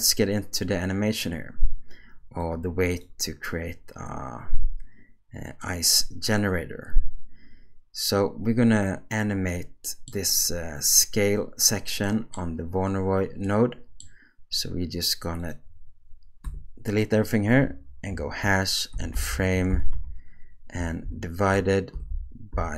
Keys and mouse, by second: 2.6 click, 5.7-10.1 middle drag, 12.1 middle click, 13.4 middle click, 15.5-22.7 drag.